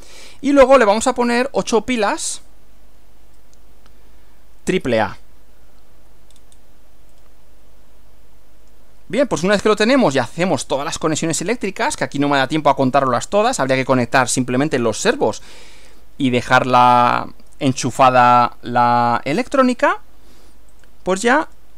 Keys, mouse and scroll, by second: 6.3-6.8 scroll down 1, 7.1-9.0 drag, 9.4 click, 12.1-13.6 shift+drag, 20.8 click, 21.5 right click.